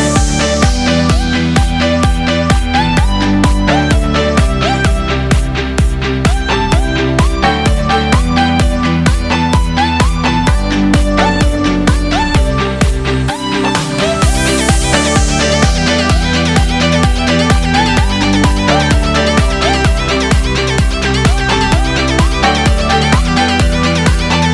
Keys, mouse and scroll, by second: 3.5 ctrl+l, 8.0 click, 10.8 click, 11.7 Escape, 11.7 KP_3, 12.7 drag, 13.0 r, 18.7 click, 19.3 click, 19.9 r, 21.4 click, 21.9 KP_1, 22.8 click.